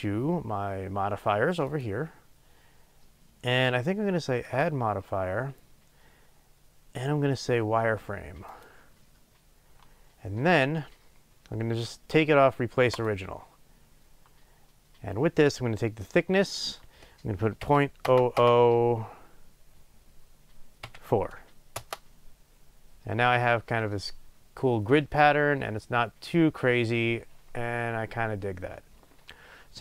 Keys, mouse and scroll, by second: 8.6-13.1 drag, 21.8-29.8 drag, 21.8 KP_0, 22.0 Return.